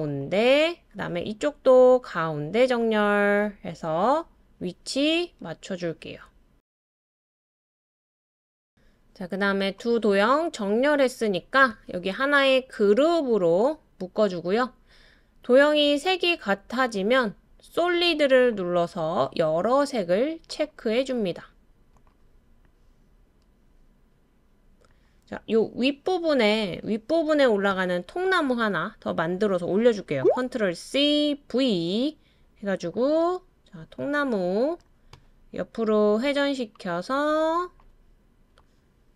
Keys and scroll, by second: 30.9 super+c, 31.4 super+v.